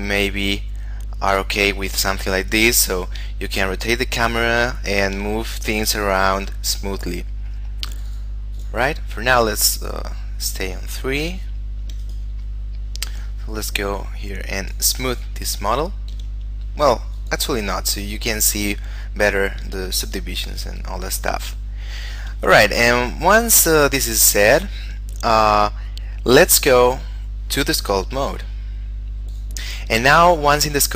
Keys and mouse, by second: 3.6 shift+middle click, 8.0 click, 11.8 shift+middle click, 12.2 right click, 14.7 click, 17.3 click, 19.8 shift+middle click, 21.8 shift+middle click, 28.3 click, 30.2 middle click, 30.8 shift+middle click.